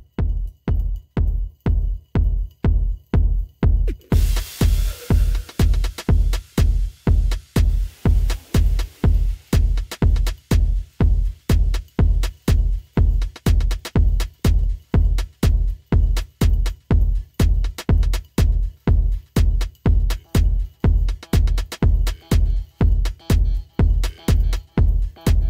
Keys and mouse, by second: 2.7-3.1 alt+middle drag, 3.3-6.1 alt+drag, 6.4 alt+middle drag, 6.8 alt+click, 9.9 alt+click, 11.4 click, 19.1-21.8 alt+drag, 22.9 click, 25.3-25.4 drag.